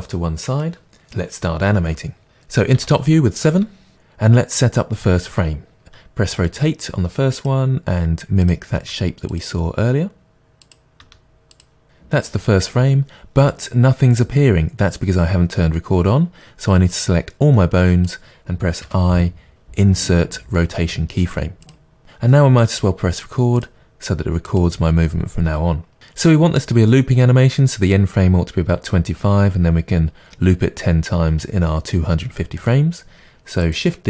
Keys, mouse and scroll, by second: 0.0-3.9 drag, 2.8 KP_7, 3.9-5.8 middle drag, 5.8 click, 6.4 r, 7.5 click, 8.8 r, 10.4 click, 10.5 r, 10.9 click, 11.0 r, 11.5 click, 16.9-18.0 drag, 24.5 click, 33.7 click.